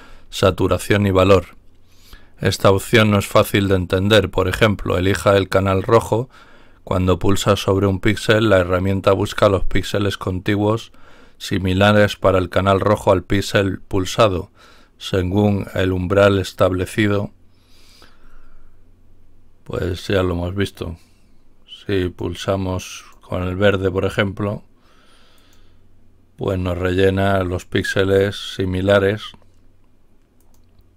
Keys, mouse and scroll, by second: 19.8 click, 21.9 click, 22.9 click, 25.3 click, 30.3 click.